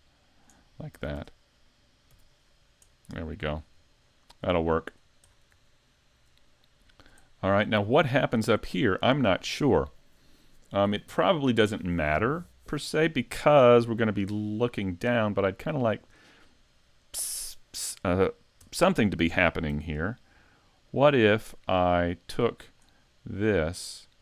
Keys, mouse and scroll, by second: 0.6-1.0 scroll down 3, 1.0 a, 1.2 Tab, 1.7 middle click, 2.1 z, 2.5-2.9 scroll down 2, 2.9 middle click, 3.6 scroll down 1, 4.0 shift+middle click, 4.5-4.8 scroll up 4, 4.9-5.6 scroll down 6, 5.8 shift+middle click, 6.5-7.2 scroll down 4, 7.3 shift+middle click, 7.8 scroll up 2, 8.2 shift+middle click, 14.0 scroll down 2, 14.4 shift+middle click, 15.0 middle click, 15.4-15.9 scroll up 3, 15.9 shift+middle click, 17.6 right click, 18.6 Tab, 19.7 ctrl+r.